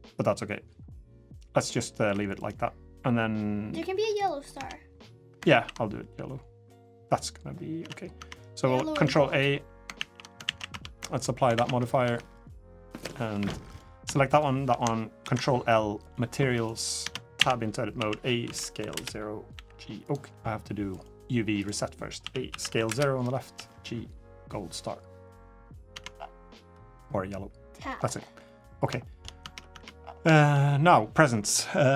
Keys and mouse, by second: 1.7 Tab, 3.9 click, 4.3 Tab, 4.8 drag, 5.3 ctrl+a, 7.6 Tab, 7.9 Tab, 8.7 ctrl+a, 9.7 ctrl+a, 10.3 ctrl+a, 10.5 Tab, 11.3 ctrl+a, 11.8 Tab, 12.2 click, 13.1 Tab, 13.5 click, 15.0 ctrl+l, 16.3 click, 16.8 Tab, 17.1-19.3 typing, 18.7 Return, 20.8-21.4 drag, 22.0 a, 22.3 s, 23.3 g, 25.3 click, 25.7 Tab, 26.4 click, 26.8-27.5 middle drag, 28.2-28.5 drag, 28.8 shift+drag, 29.2 Tab, 29.5 Tab, 30.1 shift+drag.